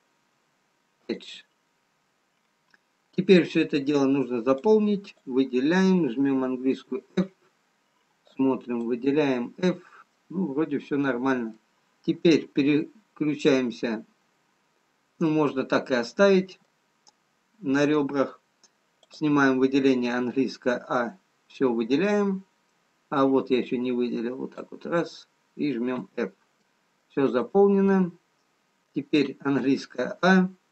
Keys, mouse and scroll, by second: 0.5 click, 0.9 x, 2.6-3.7 scroll down 1, 5.0 click, 8.8 f, 10.1 f, 10.6 middle click, 15.8 middle click, 19.5 click, 20.4 a, 21.7 middle click, 27.3 f, 28.6 middle click, 28.6 click, 30.3 a.